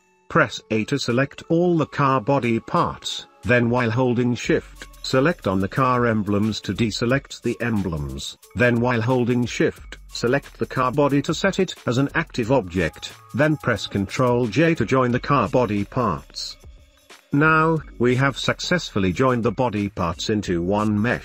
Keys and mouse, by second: 0.9 a, 2.5-4.8 middle drag, 4.9 shift+middle drag, 5.1 shift+middle drag, 6.3 middle click, 6.6 shift+middle click, 6.8 shift+middle click, 7.1 shift+middle click, 7.6 shift+middle click, 8.0 shift+middle click, 8.5 shift+click, 9.6 middle click, 10.5 shift+middle click, 11.1 shift+middle click, 12.0 shift+middle click, 12.9 shift+middle click, 14.0 shift+middle click, 14.5 middle click, 14.9 shift+middle click, 15.3 middle drag, 16.3 ctrl+j, 17.6 shift+middle click, 18.3 shift+middle click, 18.7 shift+middle click, 19.1 shift+middle click, 19.4 middle click, 19.9 middle click, 20.2 middle click, 20.4 shift+middle click, 20.8 g.